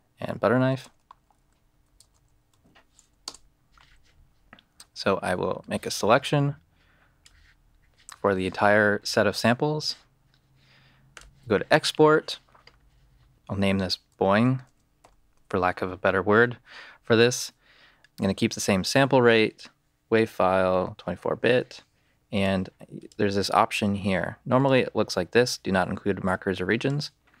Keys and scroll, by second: 0.4-3.2 typing, 3.2 Return.